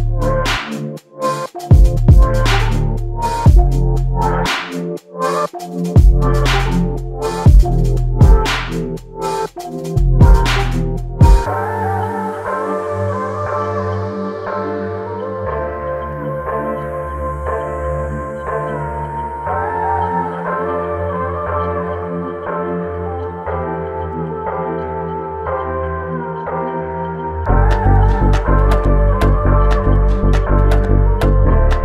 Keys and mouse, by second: 7.5 f, 8.8 alt+shift+click, 14.3 ctrl+click, 16.9 shift+click, 20.2 alt+shift+click, 21.5 shift+click, 22.9 alt+shift+click, 23.6 ctrl+click, 26.8 shift+click, 29.0 shift+click, 30.6 shift+click.